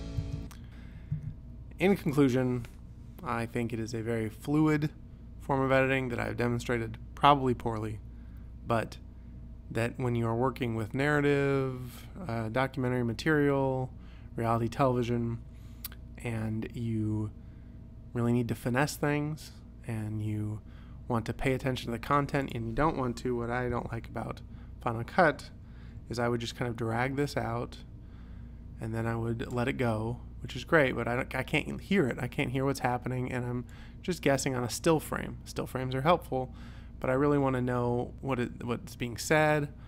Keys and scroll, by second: 0.3 space, 23.8 u, 26.1 p.